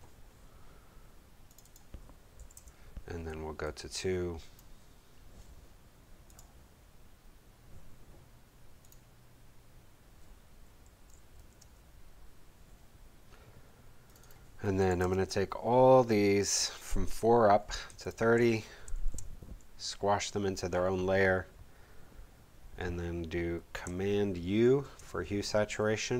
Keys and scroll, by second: 2.4 4, 2.5 Page_Up, 11.3 2, 11.6 Page_Up, 14.9 2, 15.0 Page_Up, 18.9 shift+super+e, 24.6 super+u.